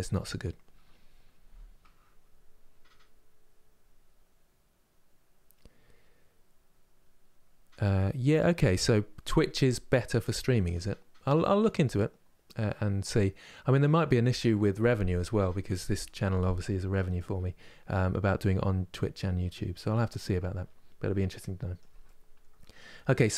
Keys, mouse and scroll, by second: 21.7-23.3 middle drag.